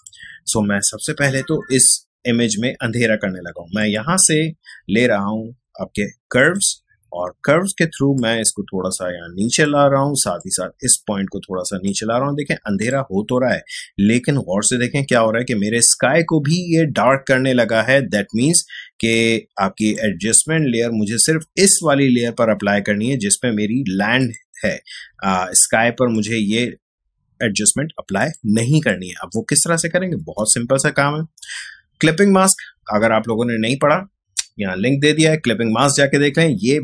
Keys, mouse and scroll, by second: 3.8 click, 6.3-15.0 drag, 19.8 click, 24.2 click.